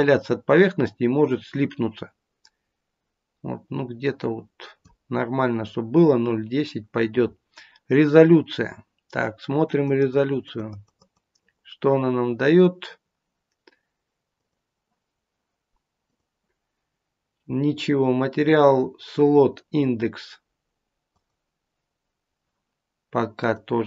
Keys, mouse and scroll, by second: 9.5 click, 10.3 click, 10.4 click, 11.0 click, 11.4 click, 14.2 click, 16.0 click, 21.1 click, 23.6 click.